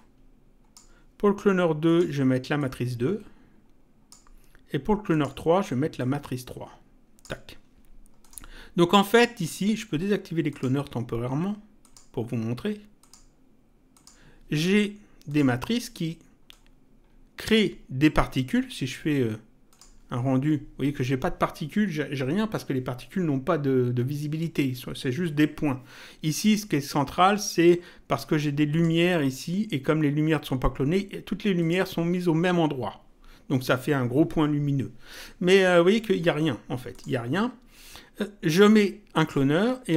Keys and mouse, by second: 1.8 click, 5.1 click, 8.2 click, 10.5 click, 11.8 click, 13.0 click, 15.3 click, 16.5 click, 19.7 click, 28.7 click, 31.6 click, 36.9 click, 39.1 click.